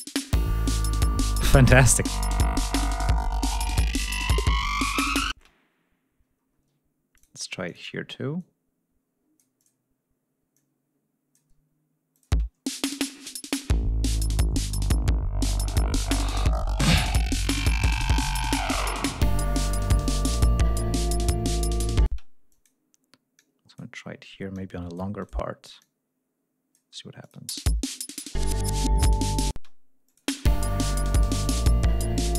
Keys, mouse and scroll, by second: 0.8 ctrl+scroll down 2, 1.1 ctrl+scroll up 2, 5.3 space, 6.4 ctrl+scroll up 2, 7.1 ctrl+click, 7.6 click, 8.3-9.8 drag, 10.5 click, 12.1 click, 12.3 space, 12.5 ctrl+scroll down 2, 12.8 ctrl+scroll up 2, 14.0 ctrl+scroll down 2, 14.5 ctrl+scroll up 2, 19.8 ctrl+scroll down 2, 20.2 ctrl+scroll up 2, 20.8 ctrl+scroll down 2, 21.1 ctrl+scroll up 2, 22.0 space, 22.5 click, 23.3 click, 24.5 click, 25.2 click, 25.8 click, 27.2 click, 27.3 space, 29.5 space, 30.0 click, 30.2 space, 30.6 ctrl+scroll down 2, 30.9 ctrl+scroll up 2.